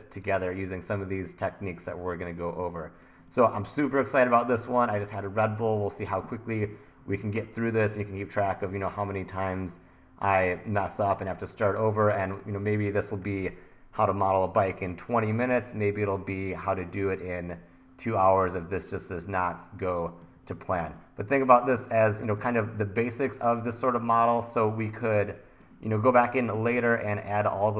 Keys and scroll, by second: 3.3 1, 4.0 1, 15.8 1, 20.3 1, 21.6 1.